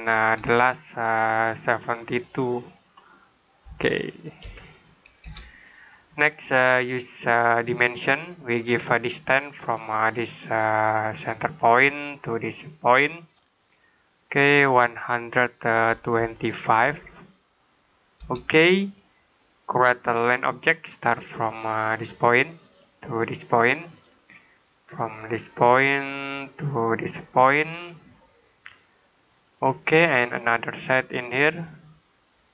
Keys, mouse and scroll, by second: 0.3 Return, 1.8 click, 3.5-4.3 typing, 5.1 Return, 7.9 click, 11.0 click, 13.5 click, 15.6-16.7 typing, 18.0 Return, 20.1 click, 29.3 click.